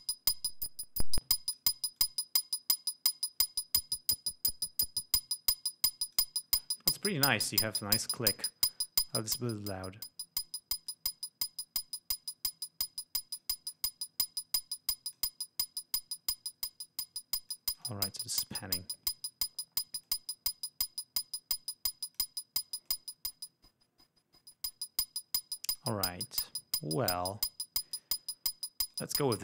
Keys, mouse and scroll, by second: 2.2-6.5 drag, 9.3-10.8 drag, 11.1-13.8 drag, 13.9-15.5 drag, 16.5-18.3 drag, 20.3-22.6 drag, 23.1-26.2 drag, 28.1 click, 29.1 right click.